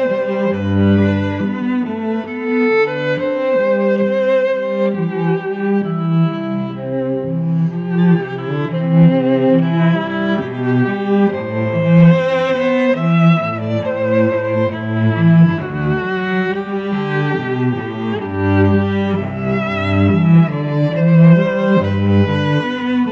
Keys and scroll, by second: 1.7 Return, 2.1 v, 2.9 alt+BackSpace, 3.4 ctrl+BackSpace, 4.1 Right, 4.4 shift+Left, 6.4 ctrl+Return, 6.8 v, 7.7 alt+Down, 11.7 t, 14.4-16.3 typing, 21.7 y, 22.9 t.